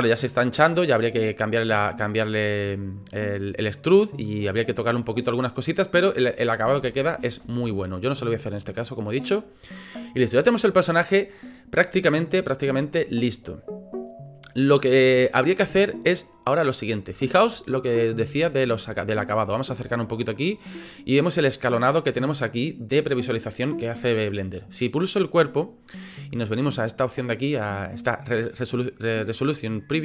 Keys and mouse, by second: 3.9 click, 6.8 ctrl+z, 7.4 ctrl+z, 7.9 click, 8.4 click, 8.9-9.3 drag, 15.6-15.9 drag, 17.1-17.5 shift+middle drag, 18.4-18.8 shift+middle drag, 19.5 shift+drag, 19.8 middle click, 24.7 click.